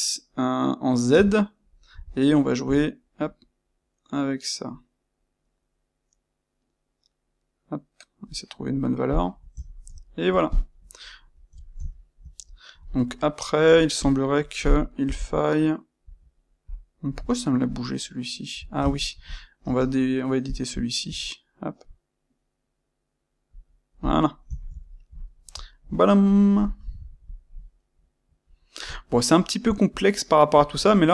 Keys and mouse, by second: 9.0-9.5 shift+drag, 9.5 ctrl+middle click, 10.5 click, 10.6-13.9 middle drag, 13.9 click, 14.9 KP_1, 16.6 click, 17.3-19.2 ctrl+middle drag, 19.2 click, 19.6 space, 24.0 click, 24.5-27.2 ctrl+shift+middle drag, 27.2 click, 27.7-29.8 middle drag, 29.8 click, 30.5-31.1 middle drag.